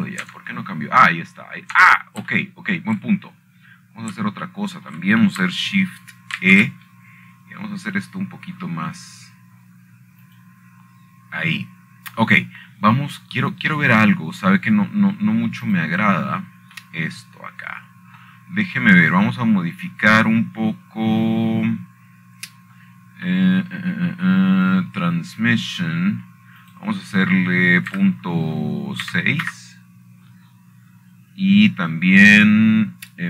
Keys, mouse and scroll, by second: 0.0 click, 0.6 click, 0.9-1.8 scroll down 2, 2.8-4.2 middle drag, 5.7 shift+middle click, 6.0-6.6 scroll up 1, 6.6 scroll down 1, 7.2-7.7 shift+scroll down 2, 7.7-9.1 shift+middle drag, 9.1 shift+e, 13.0-14.1 drag, 16.2-17.1 scroll down 2, 17.1-18.3 scroll down 1, 18.4 click, 21.0-21.7 middle drag, 21.5-22.9 scroll up 3, 25.5 middle click, 26.9 middle click, 27.2-28.1 middle drag, 29.3-30.4 drag, 31.8 KP_6, 32.2 Return.